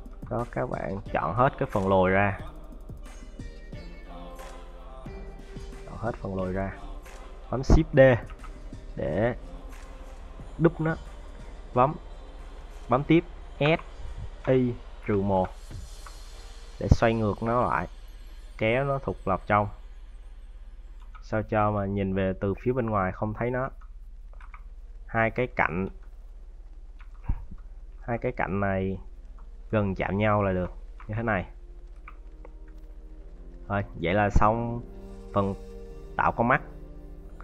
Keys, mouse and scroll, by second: 0.3 a, 0.6 c, 8.1 shift+d, 13.4 s, 17.0-18.3 scroll up 3, 18.3 click, 20.6 scroll down 4, 20.8 Tab, 21.1 middle click, 21.4 z, 22.2 middle click, 23.0 middle click, 23.4 Tab, 23.7 middle click, 24.2 z, 24.6 scroll up 4, 24.9 middle click, 25.7 `, 26.1 scroll up 1, 26.7 `, 28.2 alt+right click, 28.8 alt+right click, 29.7 alt+right click, 30.2 alt+right click, 30.7-31.7 scroll down 5, 30.9 Tab, 31.7 z, 32.5 middle click, 33.5 middle click, 34.5 middle click, 35.3 middle click.